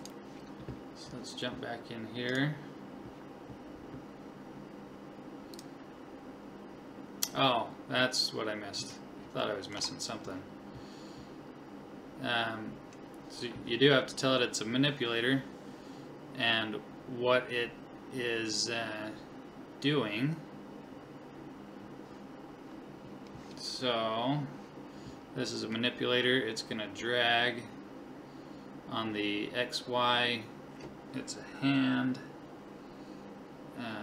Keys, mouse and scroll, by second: 2.3-5.6 right drag, 5.6 click, 9.5-11.4 middle drag, 12.0-13.3 scroll up 1, 13.3-13.9 scroll up 1, 13.9 scroll up 1.